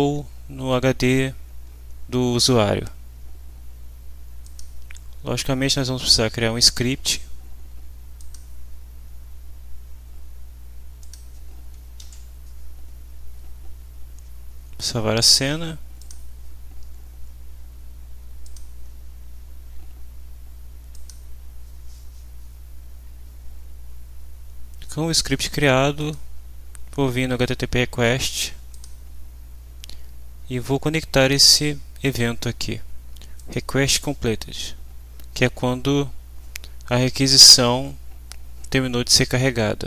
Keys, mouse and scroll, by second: 4.4 click, 8.2 click, 11.0 click, 12.0 ctrl+s, 16.0 click, 18.4 click, 20.9 click, 26.0 click, 28.7 click, 33.4 click.